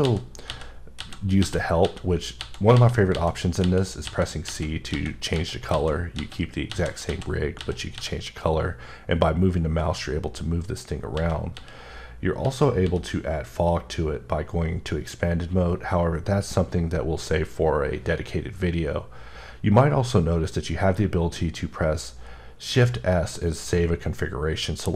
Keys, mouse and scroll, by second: 0.0-6.7 typing, 9.8-11.5 typing, 12.8 c, 14.9 typing.